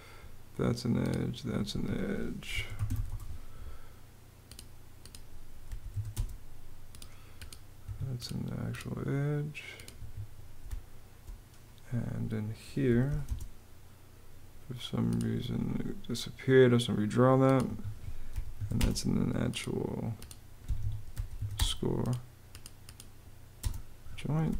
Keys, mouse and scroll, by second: 1.4 Escape, 2.0-3.1 typing, 5.3 m, 5.6 a, 5.8 space, 6.9 space, 7.5 Escape, 9.6 Escape, 10.3 space, 12.3-13.2 typing, 17.4 Escape, 17.8-18.7 typing, 20.3 Escape, 20.6-21.5 typing, 23.3 space.